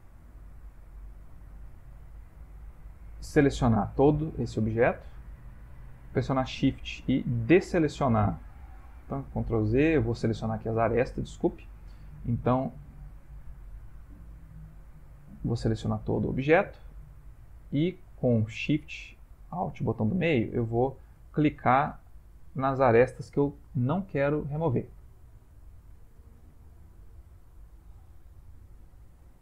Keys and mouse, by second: 4.6 click, 6.7 alt+shift+click, 8.8 alt+shift+click, 9.8 ctrl+z, 11.0 click, 13.8 ctrl+middle click, 15.0 click, 17.2 alt+shift+click, 19.6 alt+shift+click, 20.8 ctrl+middle click, 22.0 alt+shift+click, 23.6 shift+middle click, 23.8 shift+middle click, 25.6 ctrl+middle click, 25.7 shift+middle click, 26.0 shift+middle click, 26.1 shift+middle click, 26.6 ctrl+middle click, 26.7 ctrl+middle click, 26.8 shift+middle click, 27.3 ctrl+middle click, 27.6 shift+middle click, 28.9 alt+shift+click.